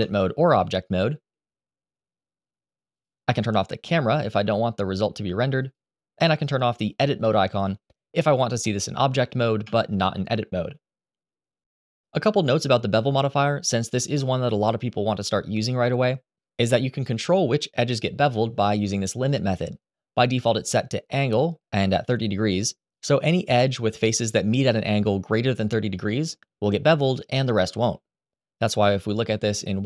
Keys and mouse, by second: 0.3-1.0 middle drag, 2.6 click, 3.6 click, 6.9 click, 8.4-9.0 middle drag, 9.3 Tab, 12.1 Tab.